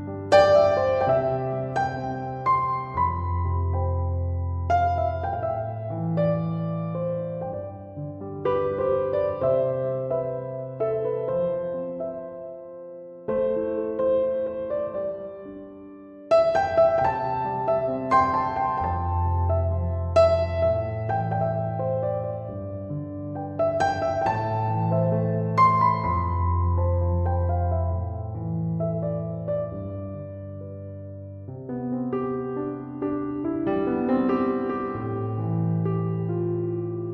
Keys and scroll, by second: 21.8 2, 23.0 Return, 31.0 ctrl+1, 36.4 ctrl+7.